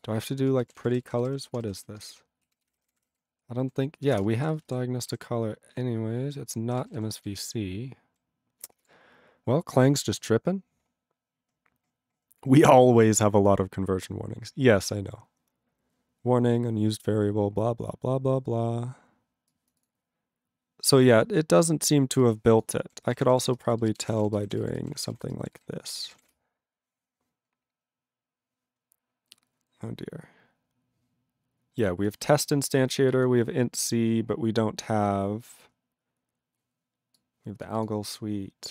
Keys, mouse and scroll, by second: 0.0 click, 0.7 ctrl+r, 0.8 p, 2.1 Return, 2.5 ctrl+s, 2.6 c, 4.2 Return, 4.4 ctrl+a, 4.5 ctrl+space, 4.6 ctrl+e, 5.1 ctrl+g, 5.7 ctrl+a, 5.7-6.7 ctrl+p, 6.7 ctrl+space, 6.8 ctrl+e, 6.9 ctrl+n, 6.9 ctrl+g, 7.2-8.1 ctrl+n.